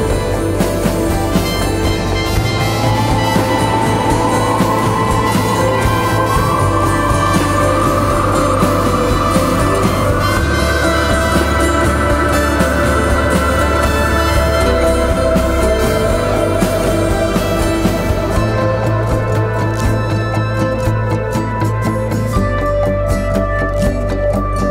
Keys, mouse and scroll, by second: 1.2 ctrl+y, 1.7-4.7 typing, 1.9 click, 2.4 click, 3.3 click, 3.8 click, 4.2 click, 4.5 click, 4.9 click, 8.8-9.8 typing, 9.1 click, 10.8 right click, 12.3 click, 14.9 alt+click, 15.6-16.0 scroll down 1, 16.2-16.9 typing, 16.5 click, 18.3 click, 22.9 ctrl+z, 23.9 alt+click, 24.4 z.